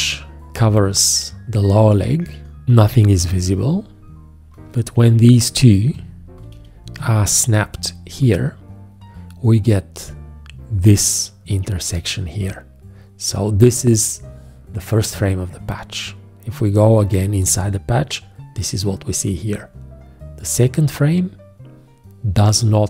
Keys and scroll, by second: 3.1 g, 5.9 v, 8.0 `.